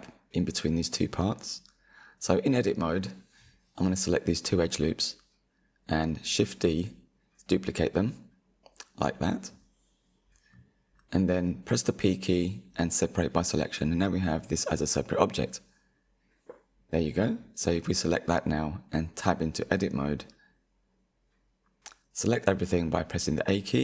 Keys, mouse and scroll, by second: 1.6-2.8 scroll up 3, 2.8 alt+shift+click, 3.6-4.2 scroll down 3, 4.2 shift+middle click, 5.0 g, 6.2 middle click, 7.2 shift+d, 10.1 p, 12.2 Tab, 12.6 click, 13.4 click, 15.4 g, 16.9-20.2 middle drag, 20.2 Tab, 21.5 2, 22.6 alt+click.